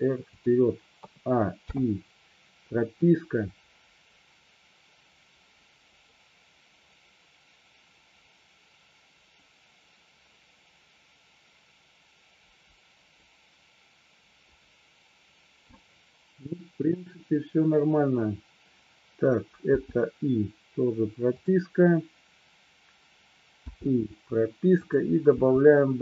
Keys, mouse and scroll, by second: 1.1 a, 1.7 i, 3.1-15.8 drag, 21.4 click, 24.9 click, 24.9 i, 25.6 i.